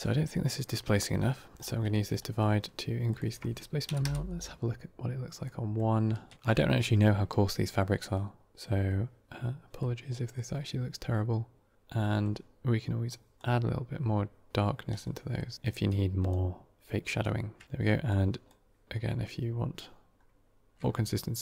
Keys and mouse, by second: 2.1 middle click, 3.0-4.9 drag, 5.3-5.8 middle drag, 9.7-10.2 middle drag, 11.9 middle click, 13.0 click, 15.3 middle drag, 15.7-16.2 drag, 17.1 click, 18.0 click.